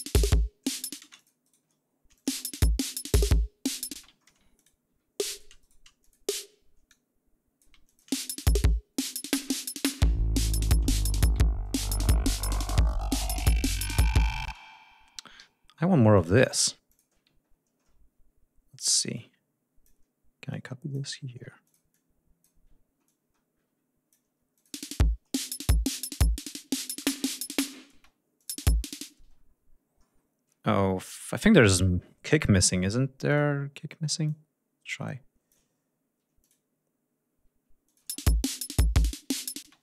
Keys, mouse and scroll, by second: 0.7 g, 0.9 space, 1.1 shift+click, 1.4 shift+right click, 2.1 click, 2.2 space, 3.8 space, 4.1 ctrl+scroll up 2, 4.5 ctrl+click, 4.8 ctrl+e, 5.1 ctrl+click, 5.9 ctrl+shift+click, 6.8 alt+click, 7.8 alt+click, 8.0 alt+space, 9.0 ctrl+scroll down 2, 9.8 ctrl+scroll up 2, 10.8 ctrl+scroll down 2, 11.5 ctrl+d, 13.0 ctrl+scroll down 2, 13.3 ctrl+scroll up 2, 14.4 space, 15.3 g, 16.1 ctrl+click, 16.4 ctrl+click, 16.8 ctrl+click, 19.1 click, 20.4-21.0 drag, 21.6-22.5 ctrl+drag, 23.0-24.2 ctrl+drag, 24.5 ctrl+click, 24.7 space, 26.9 ctrl+scroll down 2, 27.2 ctrl+scroll up 2, 27.9 ctrl+space, 28.3 ctrl+click, 28.6-30.0 ctrl+scroll up 6, 29.1 space, 30.0 scroll down 2, 30.4 scroll up 2, 33.2 click, 34.2-35.6 ctrl+drag, 35.8 ctrl+scroll down 2, 36.3 click, 37.8 click, 38.0 space, 38.3 scroll down 2, 39.6 space, 39.7 shift+click.